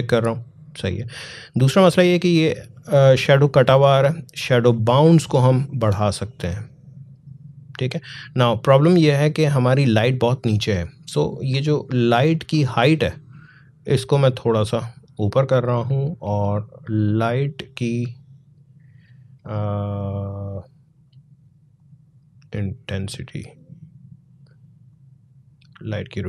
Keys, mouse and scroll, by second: 4.2-12.0 drag, 12.8-19.2 drag, 19.2-21.3 scroll up 1, 21.6-26.2 drag.